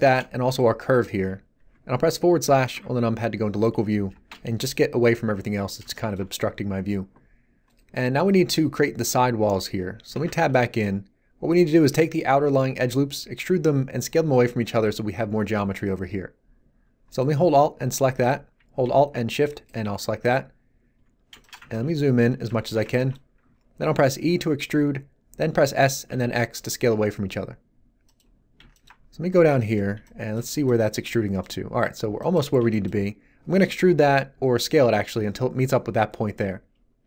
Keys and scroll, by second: 2.7 /, 4.1 shift+space, 10.1 Tab, 24.2 e, 25.3 s, 26.1 x, 30.4 z.